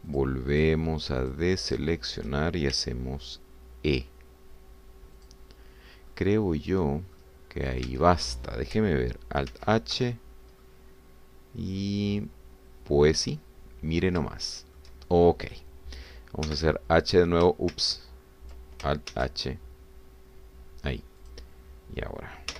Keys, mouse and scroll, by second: 0.2 click, 1.3 shift+click, 1.5 shift+click, 2.4 shift+click, 2.7 shift+click, 3.8 e, 6.2 click, 6.7 scroll down 1, 7.1-8.3 middle drag, 8.9 Tab, 10.5 alt+h, 11.3 alt+scroll down 3, 11.6-15.2 drag, 15.3 shift+click, 17.5 h, 18.7 ctrl+z, 20.1 alt+h.